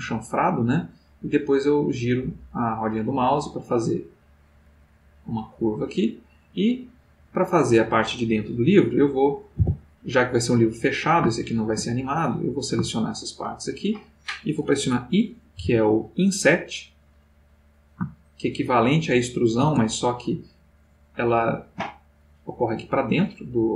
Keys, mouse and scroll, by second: 0.3-0.9 scroll up 4, 3.5 click, 4.4-6.7 middle drag, 6.9-7.9 middle drag, 9.5 3, 10.4 click, 11.3 shift+click, 11.9 shift+middle click, 13.1 shift+click, 14.1 middle click, 15.5 i, 19.6 shift+space, 21.3 shift+click, 22.1-23.1 shift+middle drag, 23.3-23.7 middle drag.